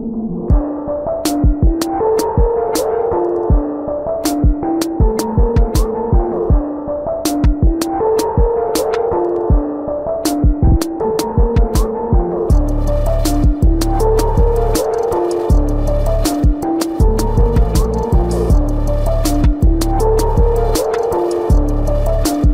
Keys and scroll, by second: 11.3 ctrl+-, 12.8 ctrl+-, 15.2 ], 16.3 ], 17.1 ctrl+-, 18.3 ctrl+-, 21.9 ].